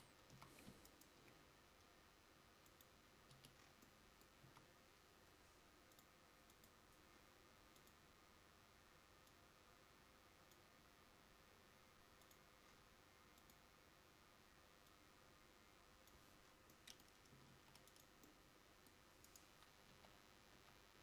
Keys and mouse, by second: 0.0 Tab, 0.4 a, 3.4 Tab, 4.6 a, 17.6 ctrl+5, 20.1 KP_7, 20.6 KP_5.